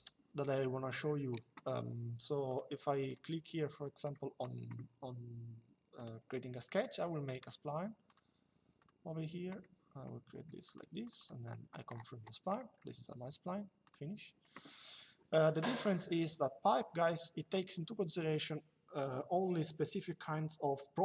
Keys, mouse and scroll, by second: 0.7 click, 2.2 click, 5.7 click, 9.3 middle click, 11.3 click, 11.3 Escape, 12.3 middle click, 13.5 click, 15.0 click.